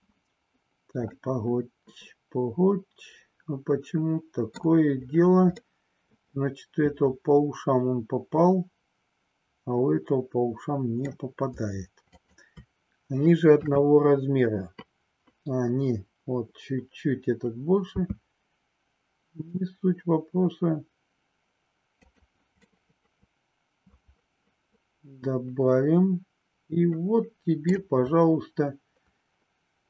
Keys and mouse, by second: 1.2-4.7 middle drag, 5.7-11.2 middle drag, 13.4 KP_3, 17.8 s, 22.0 click, 22.7-27.8 middle drag.